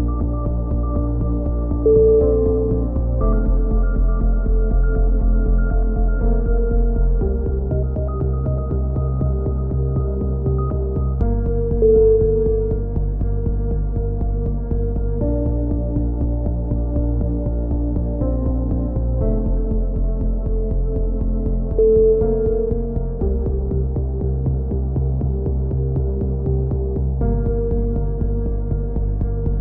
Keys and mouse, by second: 1.6 click, 2.4 middle click, 3.2 g, 5.7 c, 6.3 right click, 7.1 g, 8.2-9.2 drag, 8.5 a, 9.2 middle click, 9.8 c, 10.4 click, 11.2 g, 13.5 click, 13.8 a, 14.2 c, 15.4 g, 18.9 a, 19.1 middle click, 19.7 z, 20.0 z, 21.2 z, 21.5 click, 24.5 ctrl+KP_7, 25.0 z, 27.1 KP_7, 28.8 KP_3.